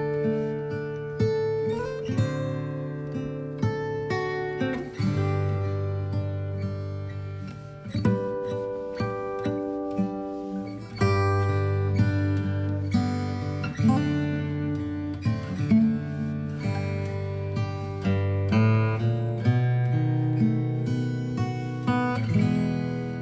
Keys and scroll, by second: 1.8 space, 11.1 space, 14.5 space, 14.8 space.